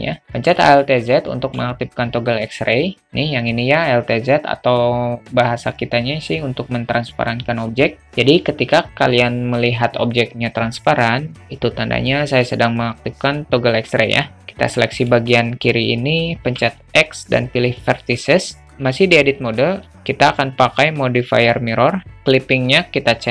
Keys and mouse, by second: 0.2 alt+z, 0.6 alt+middle click, 1.3 alt+shift+middle click, 1.7 alt+middle click, 14.4 click, 16.6 x, 20.0-22.1 drag, 22.7 click.